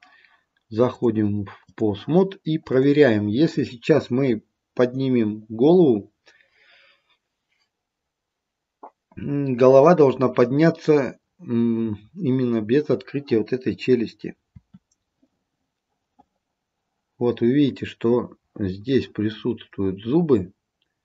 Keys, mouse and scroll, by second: 1.0 click, 2.8 click, 14.7 r.